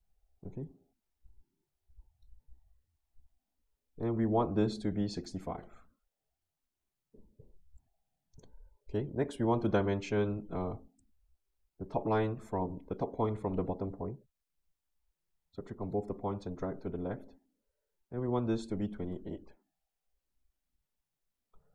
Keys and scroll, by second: 4.8-5.7 typing, 18.8 typing, 19.4 Return.